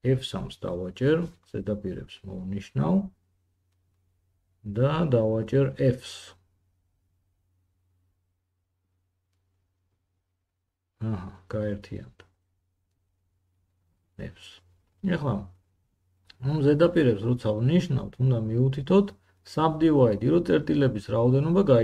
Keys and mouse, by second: 6.5 3, 9.7 shift+middle click, 9.8 shift+click, 10.3-13.6 shift+drag, 12.3 f, 13.6 middle click, 13.6-14.5 drag, 14.6 shift+click, 14.9 shift+middle click, 16.2 f.